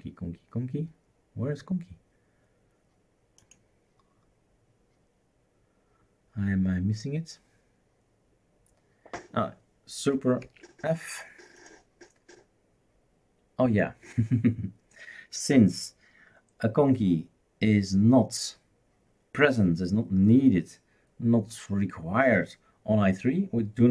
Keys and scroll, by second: 10.4 super+f.